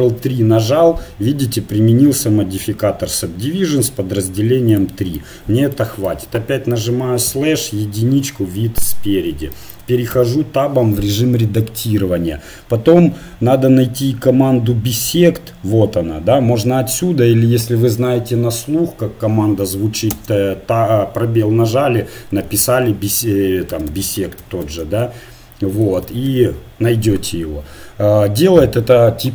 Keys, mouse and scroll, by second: 0.0 ctrl+3, 4.7-6.3 drag, 6.1 KP_Divide, 7.3 KP_1, 10.1 Tab, 20.1 space, 23.9 BackSpace, 24.0 BackSpace.